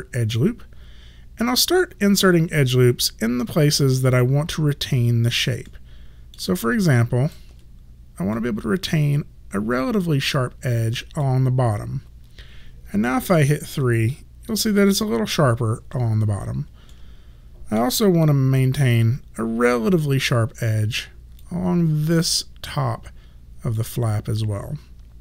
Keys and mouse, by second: 5.7 alt+middle click, 6.6 alt+right click, 8.4 click, 13.2 3, 17.0 alt+middle click, 18.9 3, 21.5 click.